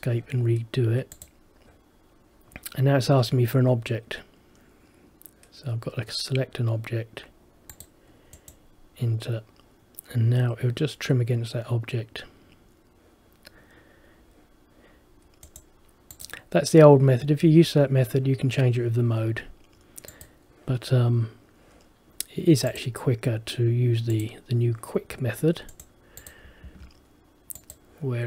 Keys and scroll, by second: 26.8 Escape.